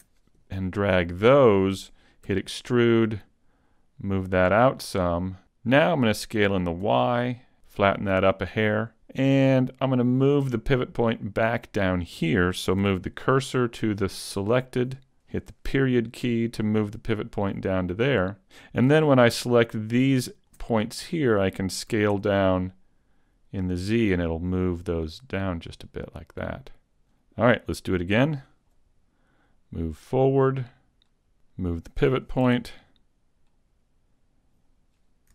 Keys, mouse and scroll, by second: 2.3 e, 2.9 click, 3.7 click, 5.4 s, 8.5 click, 11.5 right click, 12.9 shift+s, 13.8 shift+s, 15.7 ., 19.5 ctrl+click, 19.6 ctrl+click, 21.9 s, 27.0 click, 28.2 e, 28.7 click, 29.5 click, 31.5 right click, 32.5 shift+s.